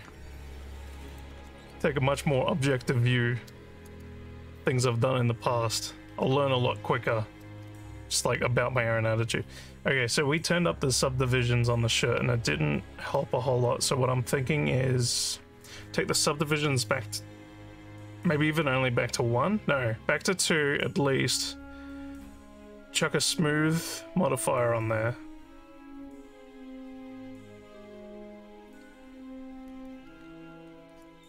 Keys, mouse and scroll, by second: 1.1 click.